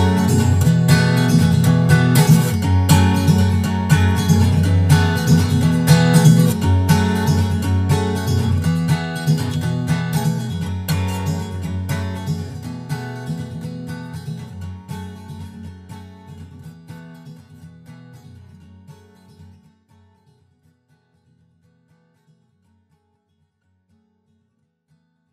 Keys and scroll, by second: 0.3 super+Right, 9.5 super+Right, 14.6 super+Right, 22.0 super+Right.